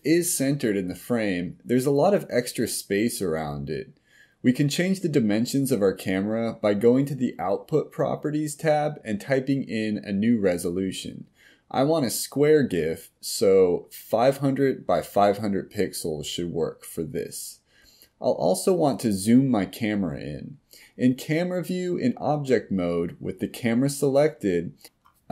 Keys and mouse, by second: 6.3-9.5 drag, 10.4-13.8 drag, 25.1 g.